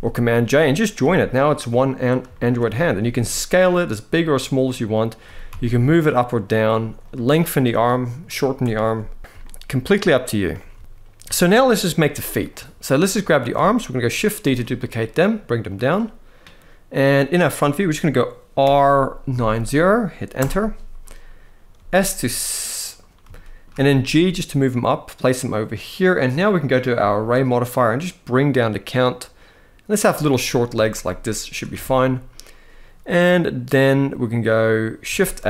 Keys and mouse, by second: 0.7 g, 2.0 shift+drag, 2.6 s, 5.0 g, 5.2 x, 6.7 click, 8.5 alt+a, 9.2 shift+middle drag, 10.4 ctrl+s, 10.5 ctrl+s, 11.2 shift+middle drag, 12.2 click, 13.0 shift+middle drag, 14.2 shift+d, 15.3 click, 18.3 r, 19.0 9, 19.1 0, 20.0 Return, 21.5 s, 22.5-22.9 right drag, 23.0 shift+middle drag, 23.8 g, 26.2 click, 26.9-29.7 shift+drag, 30.5 shift+middle drag, 31.5 alt+a, 34.9 shift+a.